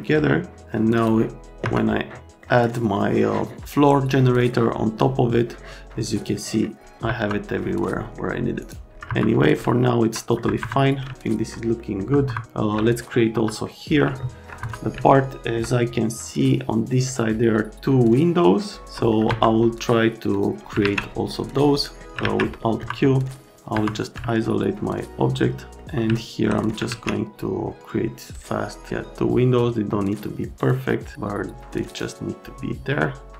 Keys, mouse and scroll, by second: 0.9 middle click, 1.6 F3, 2.4 right click, 7.0 F3, 8.6 right click, 9.1 F3, 9.5 click, 10.3 F3, 10.6 F3, 10.8 right click, 11.1 alt+right click, 11.8 right click, 12.0 F3, 12.3 F3, 12.4 alt+middle click, 13.3 F3, 13.6 middle click, 14.2 alt+middle click, 14.6 F3, 14.9 middle click, 19.1 right click, 19.3 F3, 20.3 middle click, 20.8 alt+1, 21.3 right click, 21.7 right click, 22.6 middle click, 22.8 F3, 23.7 F3, 24.3 alt+middle click, 26.1 alt+middle click, 26.8 alt+1, 30.6 click, 31.9 click.